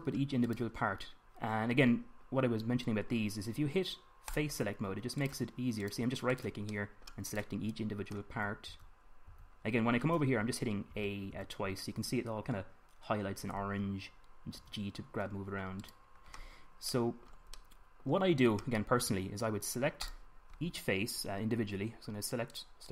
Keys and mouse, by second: 0.3-3.1 middle drag, 3.1-6.6 drag, 5.9 right click, 6.6 middle click, 7.7-9.4 drag, 9.1 a, 9.4 a, 9.9-17.6 middle drag, 10.0 a, 11.6 a, 12.1 a, 15.4 g, 22.6 middle click.